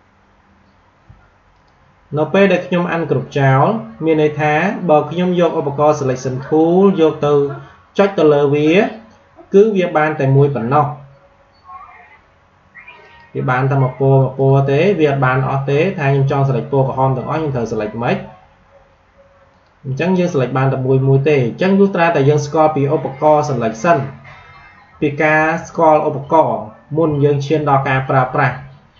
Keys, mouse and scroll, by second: 1.5 click, 7.8 click, 13.0 click, 19.4 click.